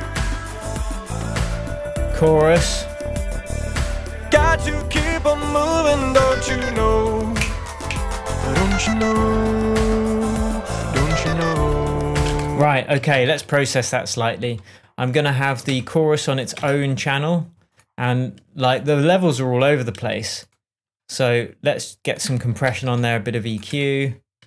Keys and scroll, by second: 12.5 space, 13.4 super+space, 13.5 super+d, 16.1 BackSpace, 23.1 super+l.